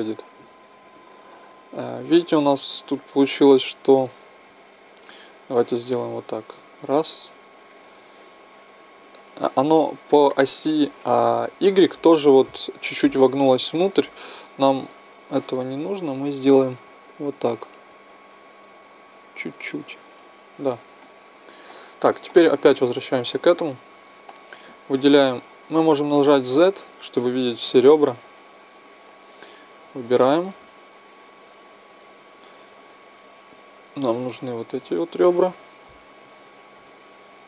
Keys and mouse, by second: 1.4 middle click, 6.1-8.0 right drag, 6.7-8.5 middle drag, 13.4-15.1 middle drag, 15.6-17.5 right drag, 17.2-21.0 drag, 21.0-29.5 middle drag, 26.3 z, 29.5 click, 30.0-35.4 right drag, 34.5-35.4 drag, 35.4 middle click, 35.9-37.4 drag, 35.9-37.4 right drag.